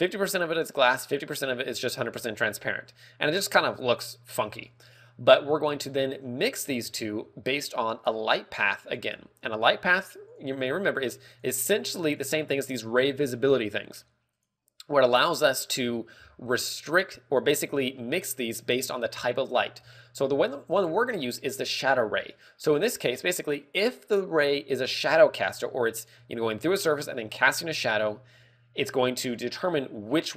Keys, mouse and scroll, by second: 1.0 click, 4.4-5.0 scroll down 3, 4.7 middle click, 5.0 scroll up 3, 6.1 scroll up 1, 7.3 shift+a, 9.6 scroll down 4, 9.9 g, 10.8 click, 11.1-11.5 scroll up 4, 11.4 g, 11.9 click, 12.6 click, 14.8 click, 16.1-16.5 scroll down 5, 16.4 middle click, 16.7 scroll up 2, 17.5 click, 17.5 scroll up 3, 18.5 middle click, 19.4-20.0 scroll down 2, 22.8 scroll up 4, 23.1 middle click, 29.3 middle click.